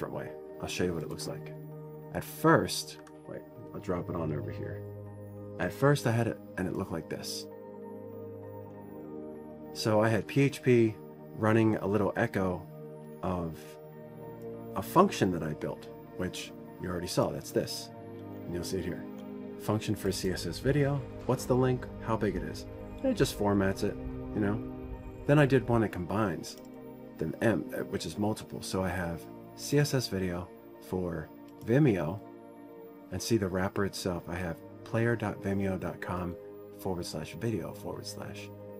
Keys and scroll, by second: 0.0 Delete, 3.7 Escape.